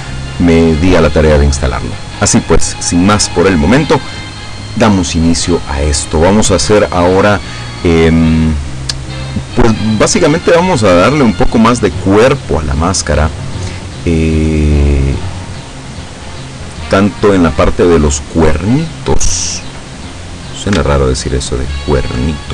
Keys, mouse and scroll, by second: 9.7-17.8 middle drag, 18.9 right click, 20.1-20.4 scroll up 1, 21.5 alt+shift+right click.